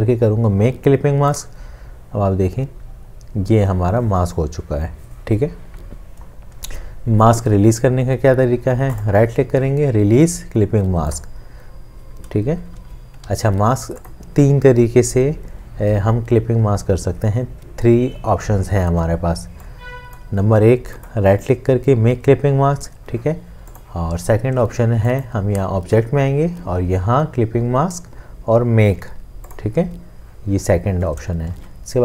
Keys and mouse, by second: 12.8 ctrl+z, 21.0 right click, 31.6 ctrl+z.